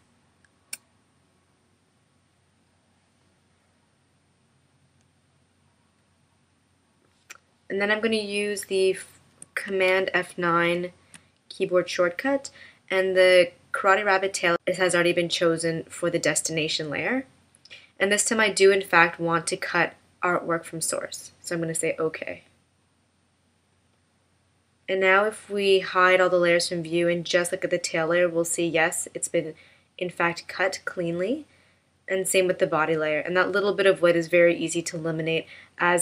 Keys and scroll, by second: 10.6 super+F9.